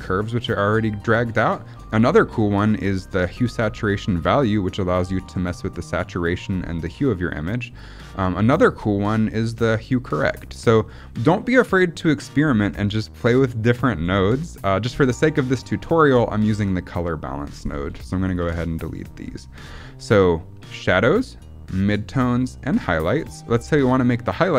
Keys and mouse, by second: 7.6-10.2 drag, 10.5 middle click, 15.2-15.6 drag, 17.4 click, 17.8 Delete, 18.2 click, 18.3 Delete, 18.8 click.